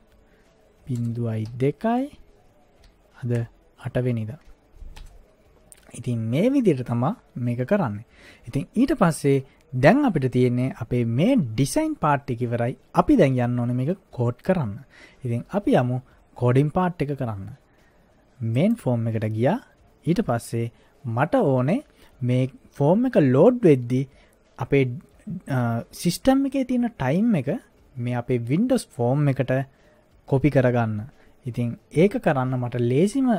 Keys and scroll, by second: 1.0 0, 1.5 2, 2.9 ., 3.4 0, 4.1 8, 5.0 Return.